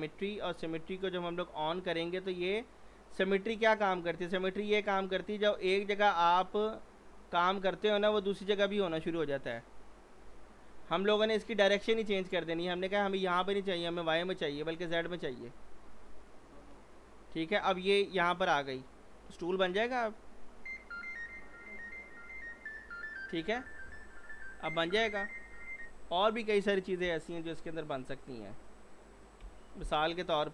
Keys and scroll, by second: 8.7 ctrl+z, 29.4 Delete, 30.4 z.